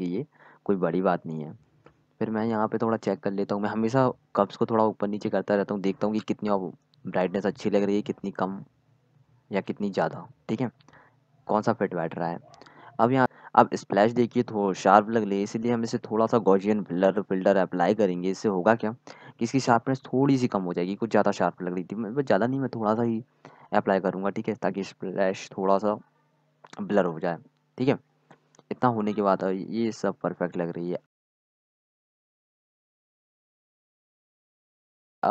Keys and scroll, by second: 0.0 x, 0.8 z, 8.0 ctrl+z, 8.3 x, 9.9-11.7 typing.